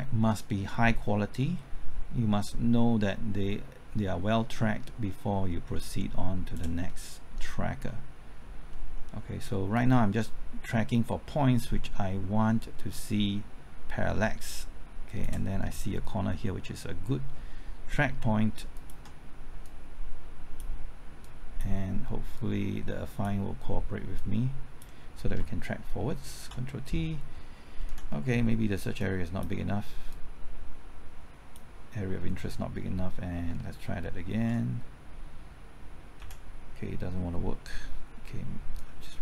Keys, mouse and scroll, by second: 6.9-8.7 middle drag, 9.7-15.3 drag, 15.3 click, 15.7 middle click, 16.1-16.4 scroll up 1, 16.4 middle click, 18.7 ctrl+click, 19.6-25.3 drag, 26.3 ctrl+t, 27.9 Left, 29.0 click, 30.1-32.3 drag, 34.3 ctrl+t, 36.2 Left, 37.9-38.7 scroll up 1, 38.7 click.